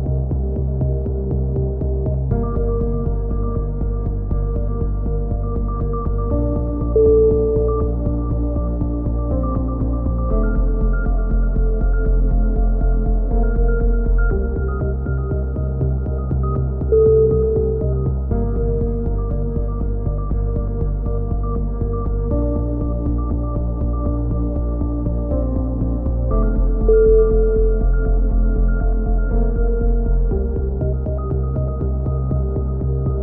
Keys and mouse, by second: 0.6-1.8 middle drag, 1.8 s, 3.3 click, 3.6 KP_7, 4.0 click, 5.3 click, 7.0-8.6 drag, 10.6 click, 11.1 right click, 11.8 click, 11.8 KP_7, 12.6 click, 14.1 s, 15.6 a, 16.1 z, 16.7 click, 17.6 KP_3, 17.9-19.3 middle drag, 18.1 z, 19.6 ctrl+r, 23.7-24.8 right drag, 24.3 click, 24.9 KP_3, 25.5 click, 26.2 middle click, 26.8 s, 28.2 click, 28.6 KP_7, 29.4 a, 29.5 z, 30.0 middle click, 30.2 Tab, 30.5 click, 32.4 KP_7, 32.6-33.2 middle drag, 32.9 z.